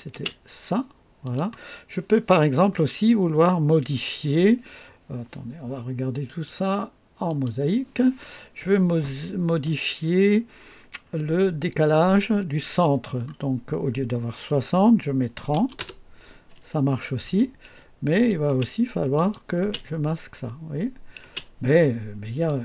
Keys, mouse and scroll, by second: 0.1 space, 1.2 click, 6.2 click, 7.2 click, 12.6 click, 15.3 KP_3, 15.5 KP_0, 15.7 Return, 18.0 click, 18.4 typing, 19.1 click, 19.6 typing, 21.1 typing.